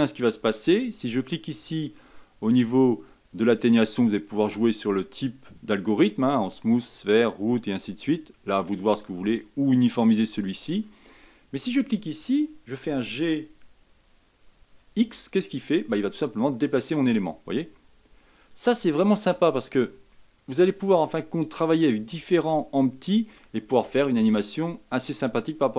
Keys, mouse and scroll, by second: 1.4-12.8 drag, 12.8 g, 20.1-20.7 middle drag, 20.7-21.3 scroll up 4, 21.3 middle click, 21.9 scroll down 2, 22.4-23.7 middle drag, 23.7-24.1 scroll down 1, 24.1-25.7 middle drag.